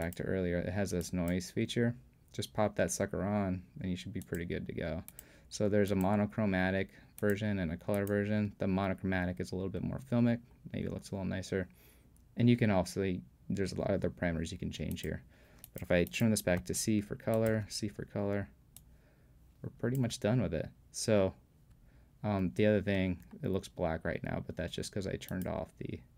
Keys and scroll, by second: 16.6 c.